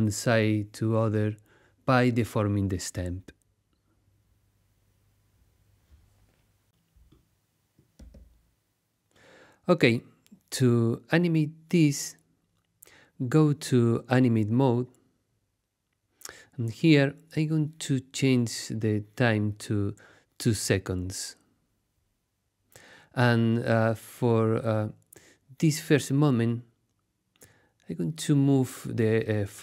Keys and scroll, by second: 4.3 super+z, 13.1 Tab, 14.0 super+Tab, 20.3 2, 20.6 0, 21.3 Return.